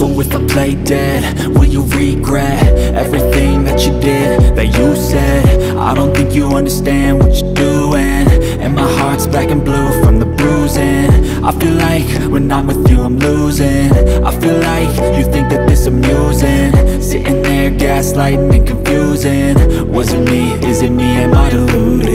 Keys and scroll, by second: 1.4 ctrl+r, 2.2 Escape, 5.6 Escape, 14.2 Escape, 15.8 F2, 19.8 e, 20.1 Escape.